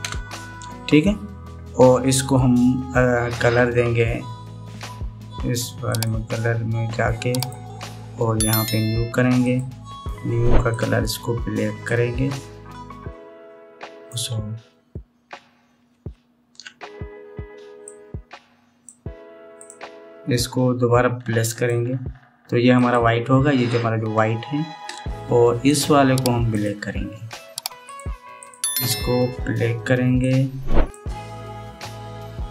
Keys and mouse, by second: 0.8 ctrl+KP_Add, 8.1 click, 10.2 click, 11.4 click, 22.1 click, 23.4-26.4 drag, 27.2 click, 28.5 click, 29.0 click.